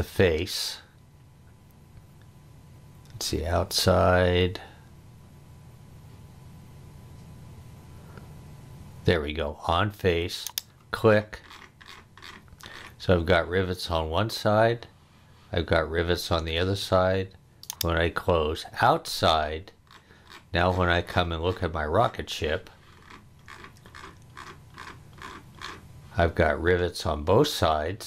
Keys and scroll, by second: 16.6 space.